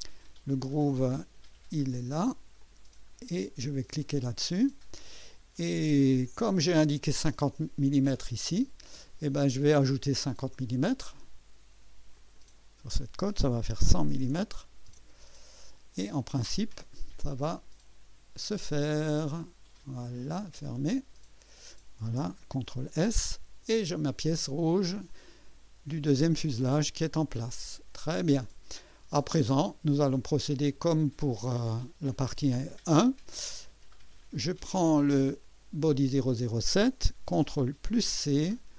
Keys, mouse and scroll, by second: 1.2 click, 1.8 space, 2.6 click, 3.0 scroll down 1, 4.0 click, 5.6-6.3 right drag, 6.4 scroll up 2, 7.9-9.4 drag, 12.1 click, 13.7-14.9 typing, 18.7-19.2 scroll down 2, 19.4 right click, 20.8 click, 22.5 ctrl+s, 23.2-25.9 drag, 26.7-28.8 drag, 28.9 click, 34.4 click, 35.6 click, 37.7 ctrl+c.